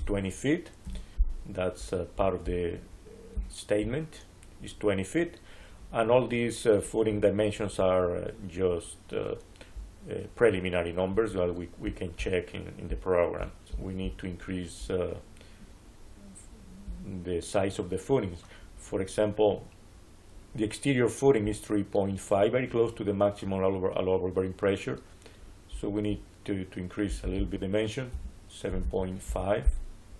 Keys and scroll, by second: 0.7 Return, 28.0-29.2 typing.